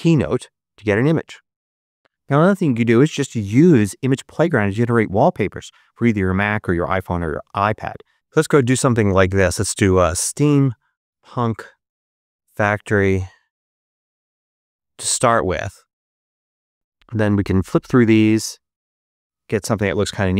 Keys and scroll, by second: 9.4 s, 9.9 m, 10.3 p, 11.6-14.0 typing.